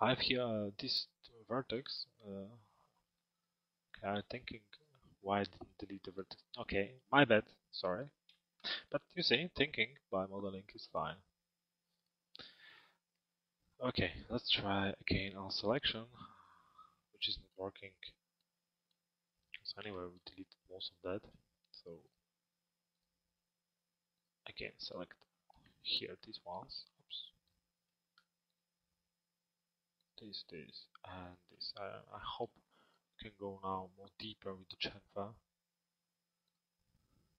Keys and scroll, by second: 10.3 BackSpace.